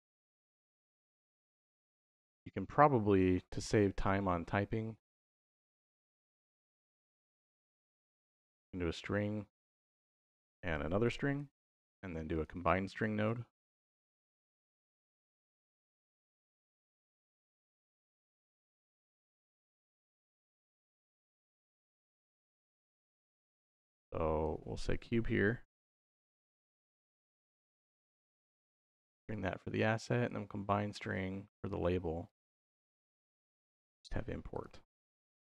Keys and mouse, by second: 1.5 middle click, 4.9 middle click, 5.3 click, 5.7 shift+a, 6.2 s, 9.7 click, 10.9 shift+d, 11.2 y, 12.2 click, 13.0 shift+a, 17.9-18.3 drag, 18.8-19.2 drag, 19.4-20.9 drag, 21.3-23.3 drag, 23.8-24.3 drag, 24.7-26.4 drag, 27.6-28.6 drag, 29.1-30.1 drag, 31.0-31.5 drag, 32.1 click, 34.4-35.5 drag.